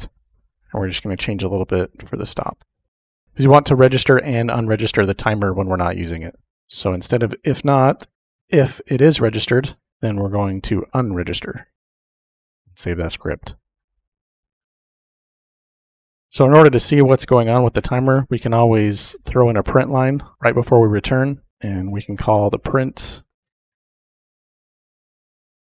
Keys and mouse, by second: 0.3 ctrl+c, 1.2 click, 2.9 ctrl+v, 6.7 click, 7.5 BackSpace, 7.7 BackSpace, 7.9 BackSpace, 8.1 BackSpace, 11.4 u, 11.5 n, 11.9 click, 14.1 middle click, 21.0 KP_Enter, 21.5 shift+Tab, 21.8-25.7 typing, 23.9 Delete, 24.1 Insert, 24.5 Left, 25.3 Left.